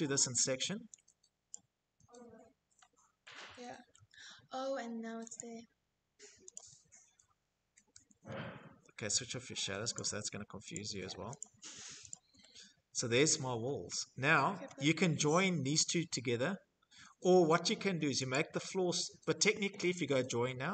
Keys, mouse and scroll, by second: 0.2 click, 1.4-1.8 scroll, 2.7 middle click, 4.1 click, 5.3 click, 5.9 middle click, 6.1 shift+middle click, 6.3 Escape, 6.9-7.6 scroll, 8.6 click, 9.4 click, 10.1 click, 10.4-10.8 scroll, 10.8 click, 12.0-13.8 shift+scroll, 13.9 Escape, 14.7 scroll, 15.6 scroll, 15.8 shift+middle click, 16.1 Escape, 16.2 middle click, 17.0 click, 17.8 Escape, 19.1-19.7 scroll, 20.4 click.